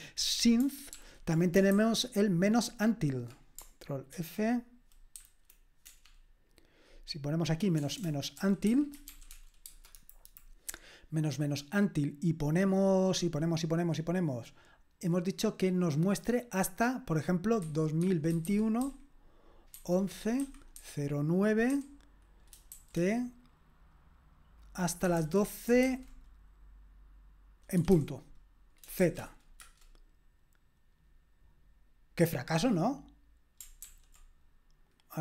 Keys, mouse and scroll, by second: 0.9 ctrl+p, 1.7 alt+b, 4.1 ctrl+f, 5.2-10.0 typing, 10.0 Delete, 10.2 Delete, 17.8-21.7 typing, 22.7 typing, 24.9-25.8 typing, 27.8 typing, 29.0 typing, 29.6 Return, 33.8 ctrl+p.